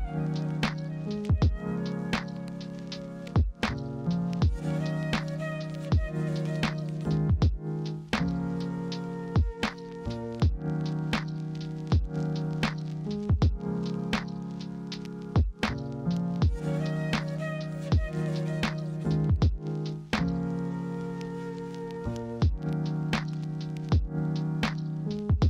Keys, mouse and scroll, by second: 1.8 ctrl+z, 10.1 ctrl+g, 14.2 ctrl+g, 15.0 ctrl+z, 17.1 ctrl+g.